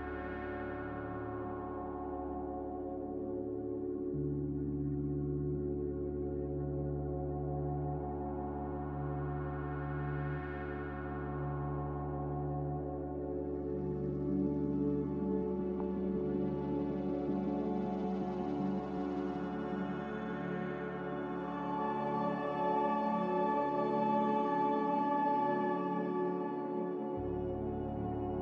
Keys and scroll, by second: 0.0 z, 3.6 m.